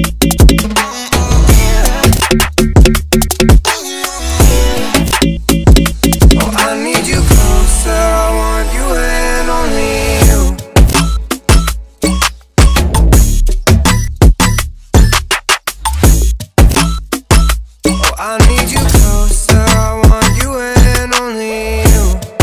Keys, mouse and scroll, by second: 1.6 typing, 8.2 ctrl+Num_Lock, 8.2 click, 8.3 ctrl+o, 9.7-13.7 drag, 13.8 click, 15.4 ctrl+o, 16.2-19.1 drag, 17.4-19.1 drag, 19.3 click, 20.0 typing, 21.1 ctrl+t, 21.6-22.4 drag.